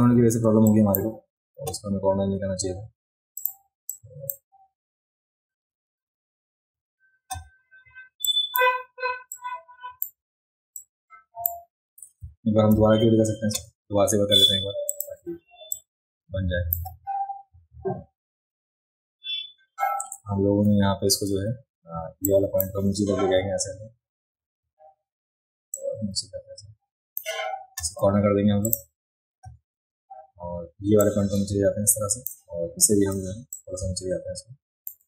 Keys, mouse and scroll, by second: 0.7 shift+click, 3.4 click, 3.9-4.3 drag, 8.2 click, 9.3 click, 10.8 click, 14.9 click, 15.8 shift+click, 21.3 a, 22.3-22.6 drag, 25.8-27.2 drag, 28.7 click, 31.0-32.3 drag, 33.5-34.9 drag.